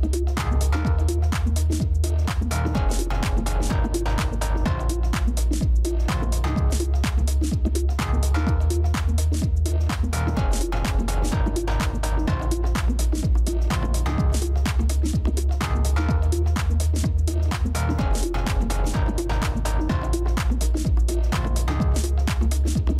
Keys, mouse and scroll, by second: 11.0 ctrl+[, 11.2 ctrl+[, 14.8 ctrl++, 16.0 shift+click, 18.6-20.6 scroll up 1.